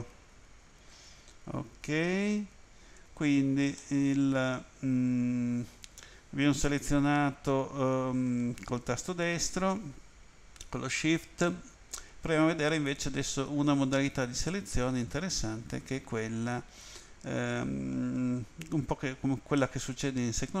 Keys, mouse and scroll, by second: 0.0 ctrl+z, 3.8 middle click, 14.5 middle click, 19.6 middle click.